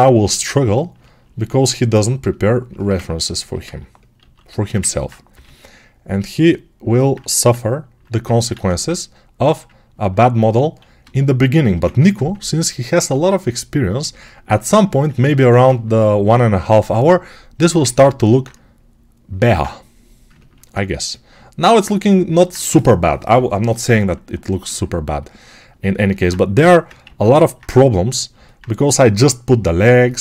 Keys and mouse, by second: 1.2 click, 4.1 alt+q, 5.2 g, 7.1 1, 8.4 ctrl+z, 12.8-15.5 right drag, 12.8 1, 16.6 g, 19.4 alt+q, 20.2-26.5 ctrl+alt+drag, 26.5-30.2 alt+right drag, 26.5 6, 26.9 alt+q.